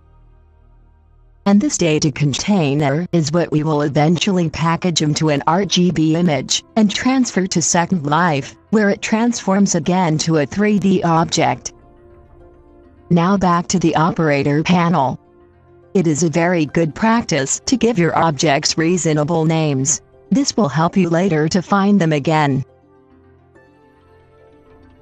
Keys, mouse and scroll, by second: 18.9-25.0 drag.